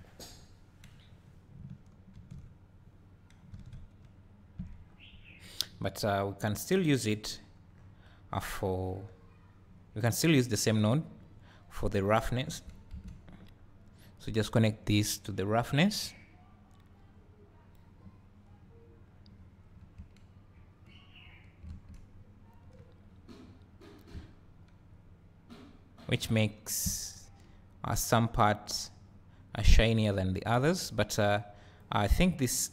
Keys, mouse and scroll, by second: 3.7 alt+a, 4.0 `, 4.4 `, 12.0 click, 15.0-22.7 drag, 22.5 scroll up 2, 22.8 `, 26.0-31.6 drag, 26.4 `, 27.2 scroll up 1, 27.5 `, 32.6-32.7 drag.